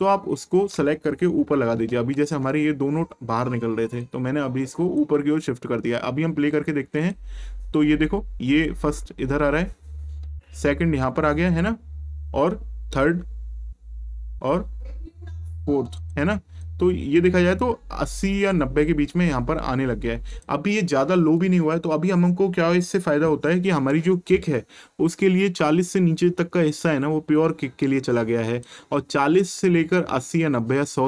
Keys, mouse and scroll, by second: 1.9 ctrl+Up, 4.0 click, 16.0 click, 20.3 click, 28.0 click.